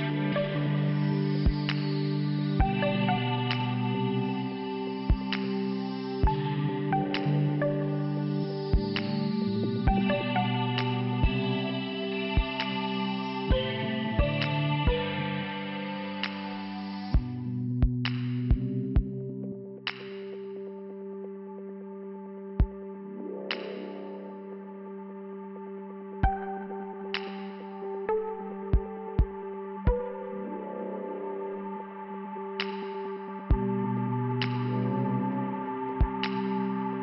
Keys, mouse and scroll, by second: 0.8 scroll down 1, 1.5 click, 1.6 click, 3.3 click, 5.4 click, 5.5 click, 12.6 click, 14.0 click, 15.7 click, 16.8 click, 16.9 click, 17.0 click, 19.5 click, 20.4 click, 21.4 click, 24.3 click, 25.9 click, 26.0 click, 26.6 click, 27.3 click, 30.8 click, 31.0 click, 32.0 click.